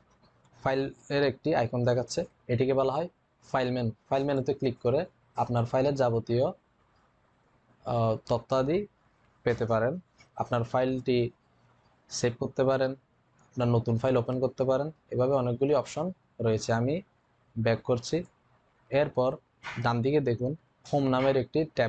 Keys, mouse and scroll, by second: 4.0 click, 17.9 click.